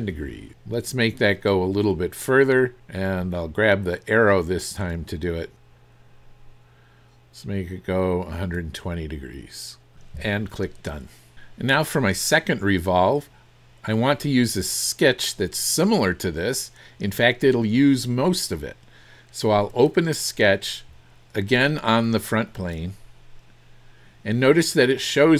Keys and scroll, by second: 0.2 KP_0.